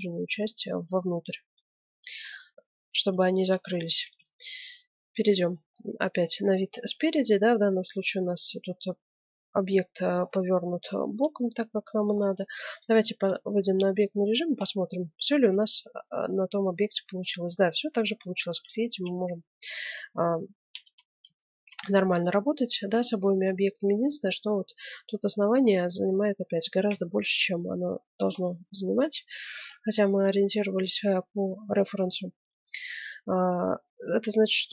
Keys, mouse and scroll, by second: 3.1-8.7 middle drag, 4.1 KP_1, 9.7-12.9 middle drag, 12.7 Tab, 13.1-16.9 middle drag, 18.7 middle click, 19.2-24.0 middle drag, 25.6 scroll up 1, 25.8-29.1 middle drag, 26.9 KP_1, 29.1 z, 32.1 middle click, 33.0-34.7 middle drag.